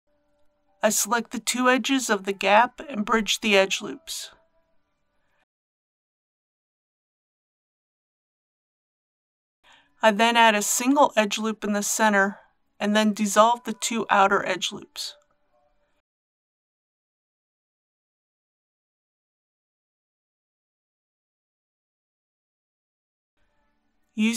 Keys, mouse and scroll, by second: 2.8 alt+shift+click, 5.3 right click, 7.3 click, 11.6 ctrl+r, 12.8 click, 16.6 alt+click, 17.7 alt+click, 20.1 right click, 21.9 click, 23.3-23.9 scroll down 1.